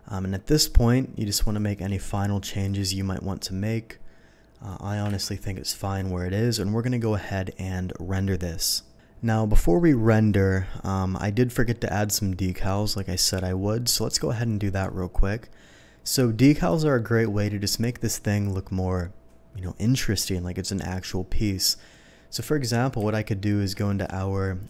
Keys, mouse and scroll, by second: 1.4 click, 2.6-4.7 drag, 5.1 ctrl+z, 9.8-11.5 middle drag, 12.7-13.2 middle drag, 14.4 KP_7, 16.8-17.2 shift+middle drag, 23.0 v, 24.0 Escape.